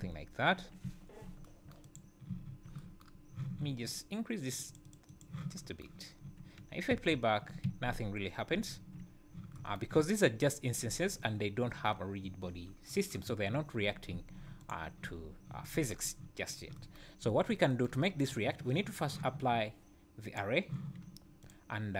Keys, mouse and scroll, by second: 0.0 `, 0.8 `, 1.8 click, 2.3 `, 4.5 click, 4.7 click, 5.1 click, 6.6-6.9 scroll down 3, 6.9 space, 7.6 Escape, 8.7 `, 9.1 scroll up 3, 10.9 `, 12.2 `, 13.5 `, 14.1 `, 14.6 click, 15.0 `, 16.4 click, 17.2 `, 20.2 click, 21.4 click.